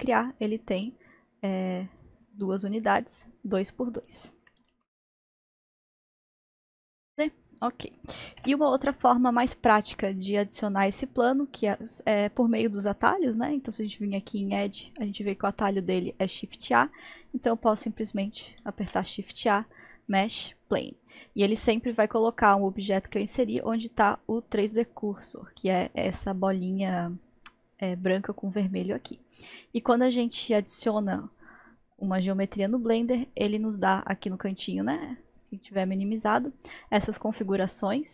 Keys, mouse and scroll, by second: 1.8-4.7 drag, 4.7 ctrl+z, 5.0 ctrl+z, 5.2-5.9 ctrl+z, 7.1-8.4 drag, 8.4 Delete, 18.6 shift+a, 35.4-36.4 drag.